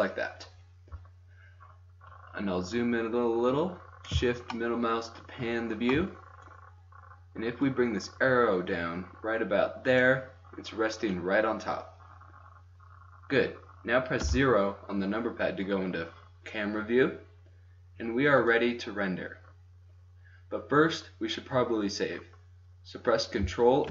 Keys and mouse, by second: 2.9-4.2 middle drag, 4.4-5.3 middle drag, 6.4-7.5 middle drag, 7.7-9.5 drag, 9.5 middle click, 11.2-12.3 middle drag, 14.2 KP_0, 18.3 click.